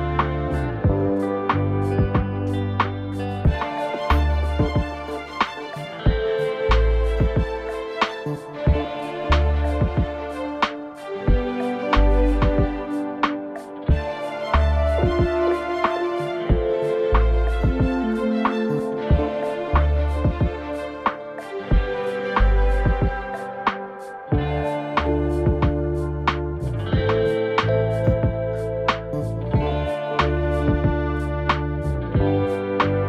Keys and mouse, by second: 2.6-2.9 middle drag, 3.1 middle click, 5.5 KP_3, 5.7 ctrl+v, 6.6 a, 6.9 click, 6.9 a, 7.4 g, 8.7 shift+middle click, 9.0 a, 9.1 click, 9.1 a, 9.6 shift+middle click, 9.9 middle drag, 10.2 right click, 12.0 shift+h, 12.1 shift+middle click, 12.3-12.8 middle drag, 13.0 right click, 14.2 middle drag, 14.8 g, 15.6 right click, 15.9 KP_1, 17.5 shift+h, 18.1 a, 18.2 a, 18.8 ctrl+z, 19.4 ctrl+z, 20.2 right drag, 20.4 shift+middle click, 20.7 Tab, 20.9 shift+middle click, 21.4 z, 21.7 a, 21.9 a, 22.0 ctrl+r, 24.9 z, 25.9 z, 25.9 a, 26.2 click, 26.2 a, 27.4-28.9 typing, 28.3 Tab, 29.1-29.6 drag, 31.0 click, 31.9-33.0 drag.